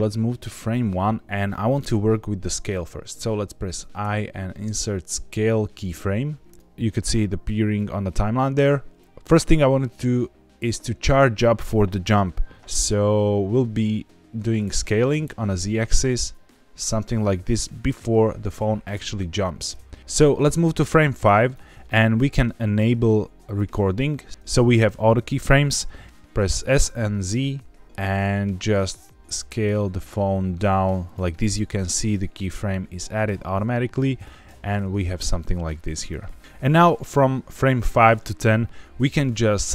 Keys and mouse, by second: 3.9 i, 7.8 click, 14.5 s, 15.1 z, 18.8 Escape, 20.2-21.5 drag, 26.0 ctrl+z, 26.4 s, 27.3 z, 31.0 click, 33.9 click, 34.4 space, 35.6 click, 37.2 click, 39.5 click.